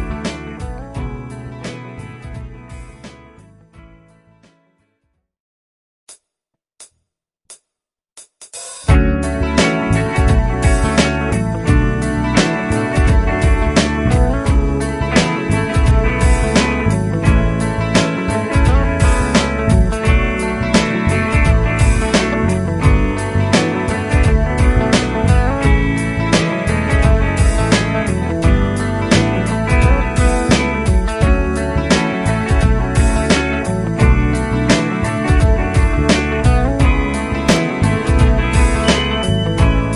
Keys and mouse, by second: 2.0 shift+click, 3.5 F12, 14.2 F4, 21.8 F9.